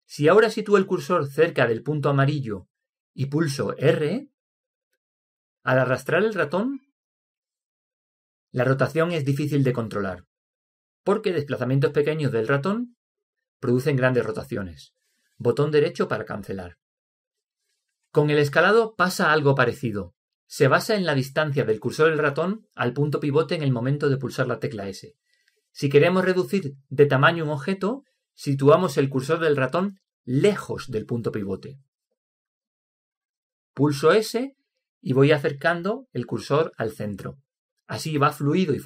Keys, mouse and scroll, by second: 4.2 r, 34.6 s.